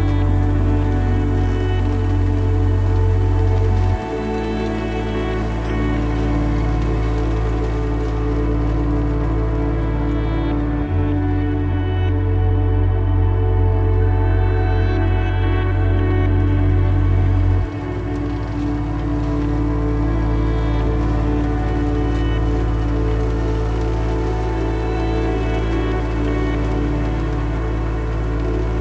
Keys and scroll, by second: 4.4 Caps_Lock, 4.8-7.1 typing, 7.9 Return, 8.4 typing, 11.2 ctrl+t.